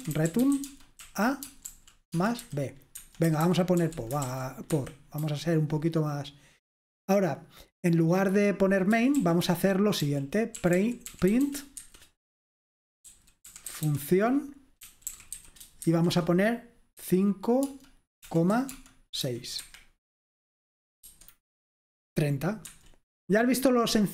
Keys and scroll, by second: 0.0-6.2 typing, 9.0-15.9 typing, 17.0-19.2 typing, 19.6 Escape, 21.1 F5, 22.7 Escape.